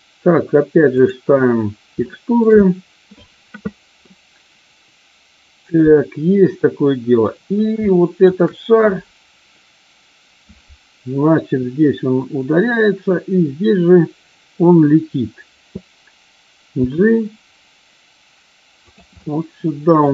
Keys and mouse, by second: 1.9-2.4 shift+middle drag, 4.0-7.1 middle drag, 7.9-8.3 shift+middle drag, 16.6 g, 18.8 click, 19.1 middle click.